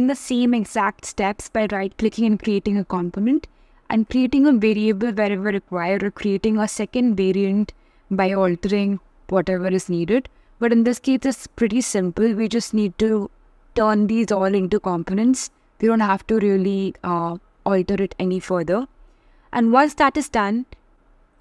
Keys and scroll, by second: 0.1 shift+m, 4.5 shift+v.